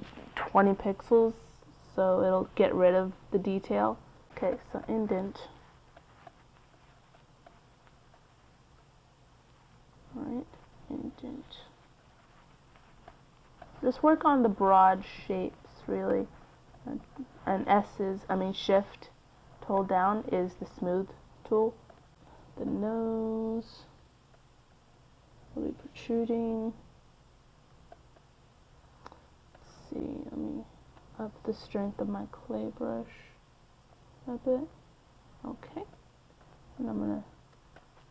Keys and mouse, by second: 0.6-3.1 middle drag, 3.1-7.4 drag, 4.4 f, 7.7 middle click, 17.6-21.9 middle drag, 21.9 f, 22.5 middle click, 24.0 f, 26.8 f, 27.0-32.9 middle drag, 33.6-38.1 middle drag.